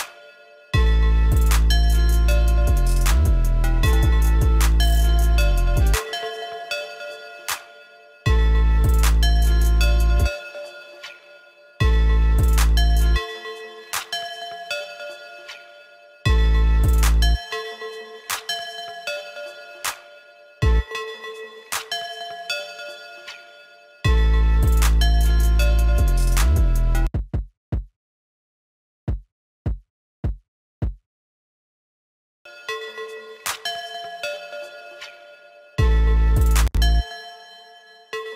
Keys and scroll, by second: 16.8 ctrl+z, 17.4 ctrl+z.